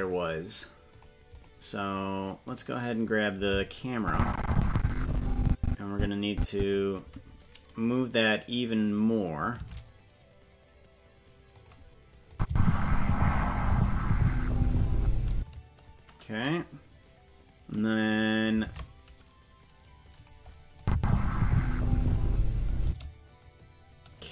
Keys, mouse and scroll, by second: 0.9 click, 1.3 click, 2.5 right click, 4.0-6.7 drag, 9.5 shift+`, 12.3 click, 12.4 space, 15.3 space, 18.6 shift+`, 20.8 click, 20.9 space, 22.8 space.